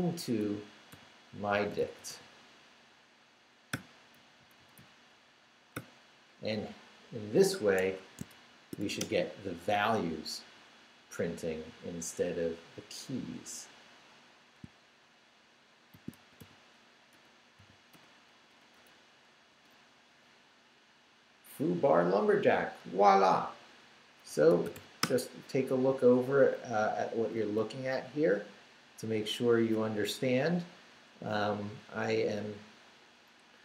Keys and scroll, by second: 0.4-2.6 typing, 3.7 [, 4.1 Right, 5.7 ], 7.8 Escape, 8.5 shift+;, 8.8 shift+w, 9.0 Return, 15.7-17.6 typing, 17.9 Return, 18.5 Up, 19.5 Return, 24.1-25.2 typing, 27.1 Right.